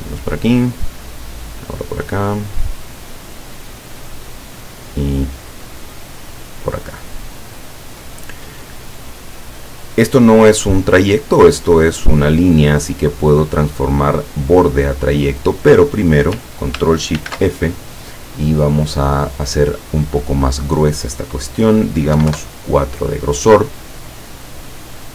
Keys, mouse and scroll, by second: 4.4 click, 6.3 click, 13.1 click, 15.1 click, 17.3 ctrl+shift+f, 18.5 click, 22.3 KP_4, 22.5 KP_Enter, 24.5 click.